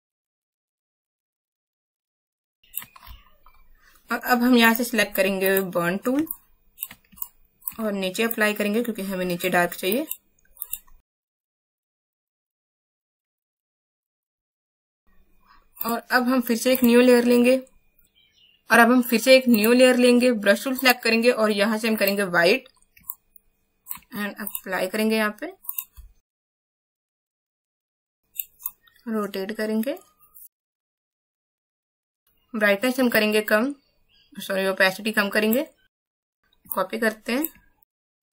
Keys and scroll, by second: 2.5 space, 6.3 space, 7.1 alt+space, 13.0 space, 36.2 space.